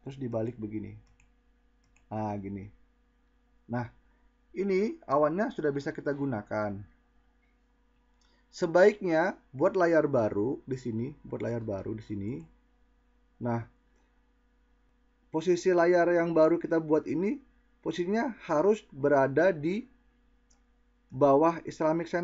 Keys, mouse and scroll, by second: 10.7-11.2 drag.